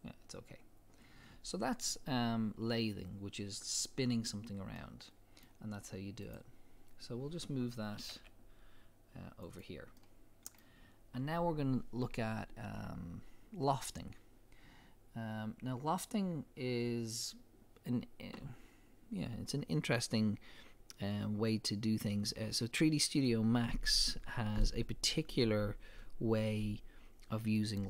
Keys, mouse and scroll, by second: 0.0-4.8 drag, 4.8-6.2 middle drag, 6.2 click, 8.0 g, 9.6 click, 10.0-24.4 middle drag.